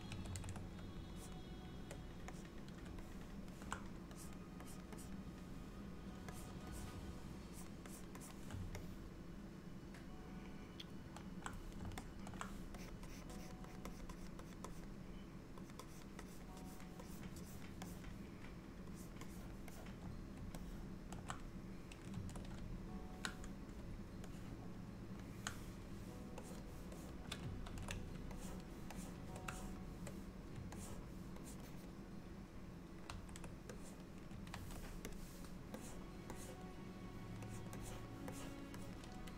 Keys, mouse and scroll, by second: 0.3 ctrl+z, 1.2 shift+click, 1.9 shift+click, 2.4 click, 3.1 middle click, 4.2 click, 4.7 click, 5.0 click, 6.4 click, 6.8 click, 7.6 click, 7.9 click, 8.3 click, 8.9 middle click, 12.0 middle click, 12.8 click, 13.1 click, 13.4 click, 13.7 click, 14.0 click, 14.2 click, 14.5 click, 14.8 click, 15.7 click, 16.0 click, 16.3 click, 16.7 click, 17.1 click, 17.5 click, 17.9 click, 19.0 click, 19.3 click, 19.8 click, 20.7 ctrl+middle click, 24.4 middle click, 26.5 click, 27.0 click, 27.8 ctrl+z, 28.4 shift+click, 29.0 shift+click, 30.0 shift+click, 30.8 ctrl+click, 31.5 ctrl+click, 31.8 ctrl+click, 33.2 ctrl+z, 33.8 click, 34.6 ctrl+z, 35.2 click, 35.9 click, 36.4 click, 37.5 click, 37.9 click, 38.4 click, 38.9 click.